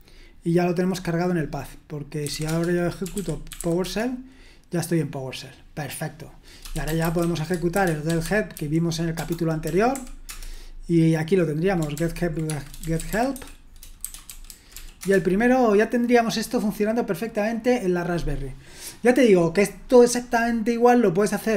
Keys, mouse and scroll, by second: 2.0-5.0 typing, 6.5-9.9 typing, 10.3 Return, 12.0 ctrl+p, 12.5-15.3 typing.